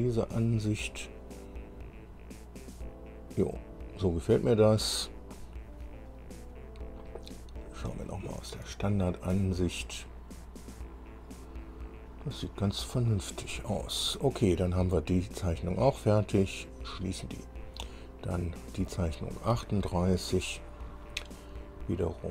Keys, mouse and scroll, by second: 1.8-2.5 scroll up 2, 3.0-3.7 scroll up 3, 4.6 scroll up 1, 7.8 click, 9.0 shift+middle click, 9.8 shift+scroll up 1, 10.6-10.9 scroll up 1, 16.6 click, 19.0 click.